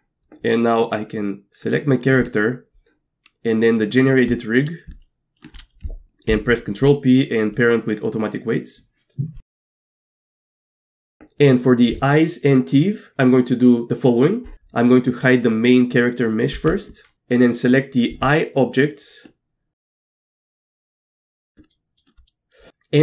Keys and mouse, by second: 1.7 click, 5.0-5.4 shift+drag, 6.3 ctrl+p, 10.3 middle click, 10.6 middle drag, 11.0 middle click, 16.5 h, 18.2 shift+click, 18.9 shift+click, 21.7 shift+middle drag.